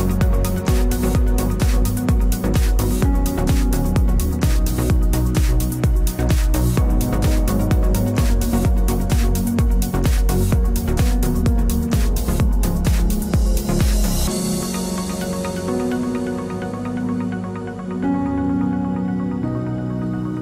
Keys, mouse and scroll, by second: 0.0 Return, 1.2 ctrl+s, 5.3 ctrl+r, 7.1-9.0 right drag, 7.5 b, 7.9 g, 9.5 ctrl+z, 9.8 ctrl+z, 10.1 ctrl+z, 11.0 ctrl+r, 12.9 right click, 13.3 g, 14.9 g, 17.1 ctrl+s, 19.8 ctrl+r.